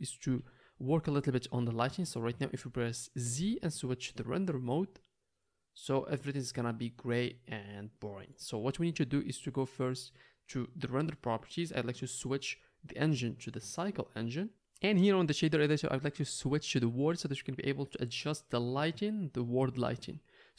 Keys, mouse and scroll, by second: 3.3 z, 6.0-7.1 drag, 7.1-14.1 middle drag, 12.6-14.1 drag, 12.6-14.1 right drag, 14.2 click, 14.2 middle click, 14.2 right click, 14.5-16.5 drag, 20.1-20.5 drag.